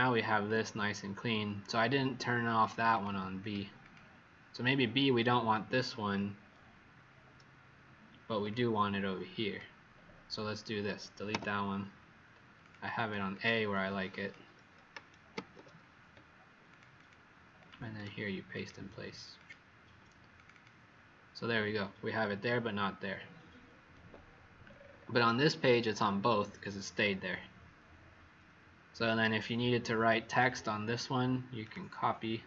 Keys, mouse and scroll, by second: 2.9 click, 3.3 click, 3.7 click, 4.9 click, 8.7 click, 11.2 Delete, 12.5 click, 12.9 click, 13.2 click, 14.0 click, 15.3 ctrl+c, 16.6 click, 16.9 click, 17.5 click, 17.9 right click, 18.5 click, 19.3 click, 20.5 click, 24.6-27.1 scroll down 8, 28.9-30.3 scroll up 1, 30.3 click, 31.6 right click.